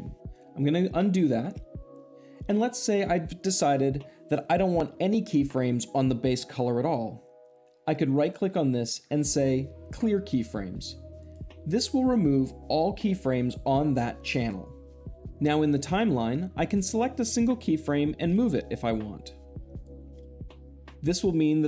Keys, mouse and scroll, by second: 1.1 ctrl+z, 8.1-9.1 right drag, 11.1-12.1 drag, 16.5 click, 18.2 g, 19.6 click, 20.4-21.3 drag.